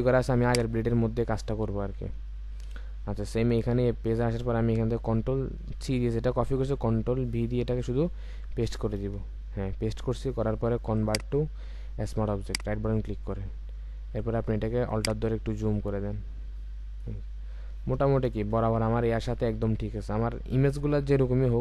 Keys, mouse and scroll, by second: 9.0 ctrl+v, 11.0 right click, 14.9 alt+click, 18.3 Return.